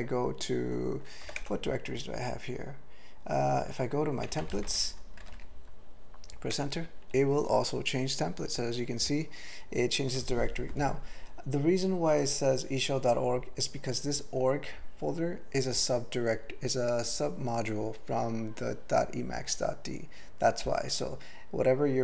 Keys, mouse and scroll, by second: 1.3 typing, 1.4 Return, 4.2 typing, 6.6 Return.